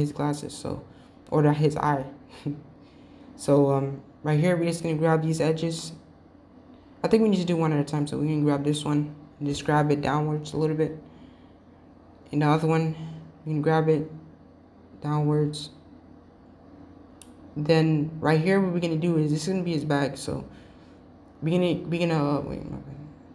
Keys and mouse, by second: 9.8 g, 14.1 g, 22.5 g.